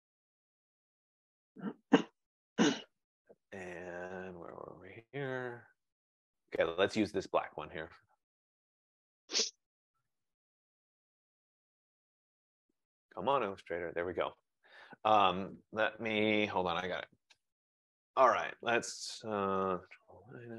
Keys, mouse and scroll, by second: 0.6 click, 0.9 click, 2.5 click, 2.7 click, 4.6 click, 4.8 click, 7.0 click, 20.1 click.